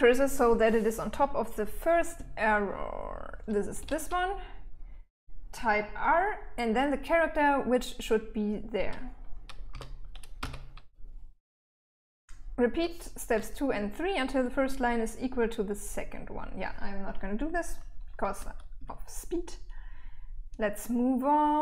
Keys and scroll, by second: 1.5-3.2 typing, 9.1 r, 9.8 n, 17.7 j, 18.1 j, 19.9-21.6 typing.